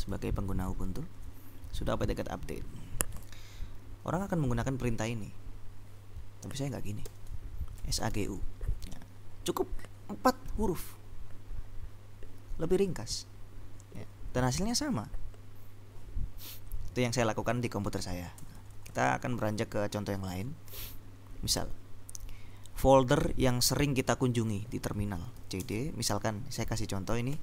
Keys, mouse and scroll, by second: 0.0-0.8 typing, 7.2 ctrl+u, 8.1 g, 8.4 u, 18.6 BackSpace, 25.4-27.4 typing.